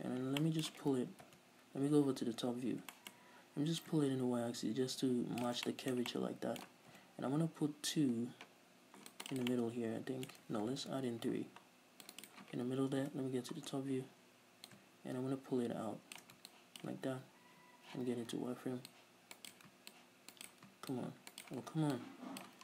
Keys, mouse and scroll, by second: 2.5 KP_7, 3.4-4.0 scroll up 2, 4.0-5.9 drag, 5.9-9.5 shift+middle drag, 7.1 ctrl+r, 9.5 click, 9.6 right click, 9.7-12.5 middle drag, 10.7 ctrl+z, 11.0 ctrl+r, 12.5 click, 13.1 right click, 13.2 KP_7, 13.9-14.3 scroll up 1, 14.9-16.8 drag, 17.7 z, 19.1 ctrl+click, 19.8 ctrl+right click, 20.1 ctrl+click, 20.7 ctrl+right click, 21.1 ctrl+click, 21.7 ctrl+right click, 22.2-22.6 ctrl+drag.